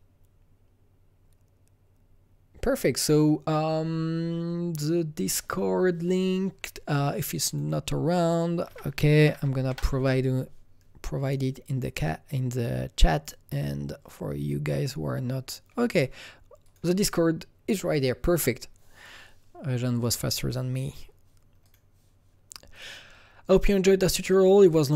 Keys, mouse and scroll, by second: 7.5 click, 8.7 d, 9.9 Return, 9.9 typing, 11.2 click, 16.6 Return, 16.6 click, 16.6 typing, 16.6 click, 19.1 click, 21.6 click, 21.8 click, 22.8 click.